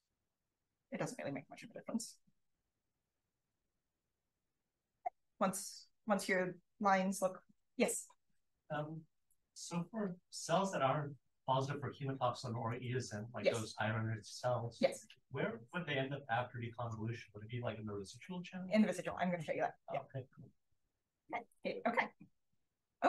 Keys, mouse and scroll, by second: 0.3 click, 21.4 click.